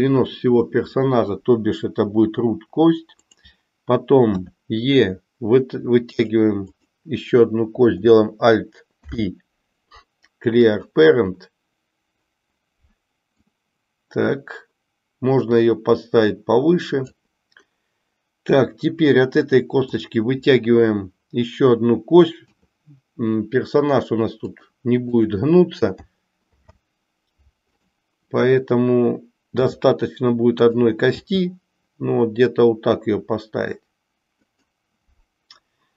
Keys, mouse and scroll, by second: 3.1 click, 4.3 e, 9.0 alt+p, 13.6-17.1 drag, 19.8 click, 22.6 e, 26.4 alt+p, 29.6 r, 31.1 g.